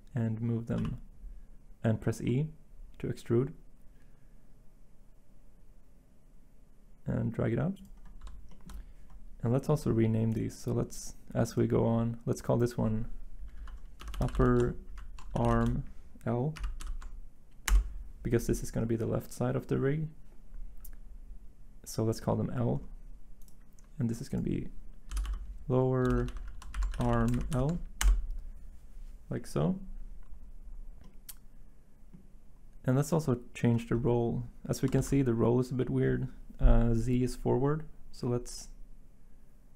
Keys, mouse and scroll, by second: 0.8 e, 18.8 Return, 18.8 typing, 25.1-27.5 typing, 28.0 Return, 35.0 z.